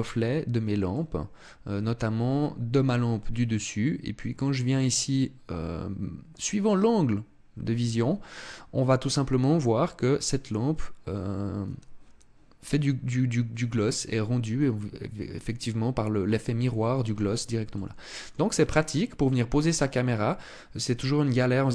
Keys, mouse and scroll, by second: 0.5 middle click, 17.4 middle click, 18.4 middle click.